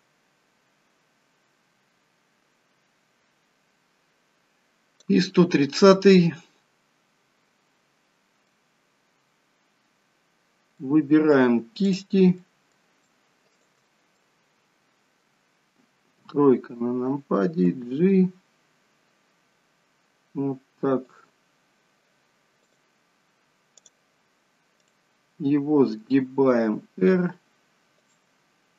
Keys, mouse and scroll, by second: 6.5 middle click, 10.7 middle click, 11.8 click, 12.3 middle click, 13.5 shift+click, 14.1 middle click, 16.3 KP_3, 17.6 g, 24.8 click, 26.3 r.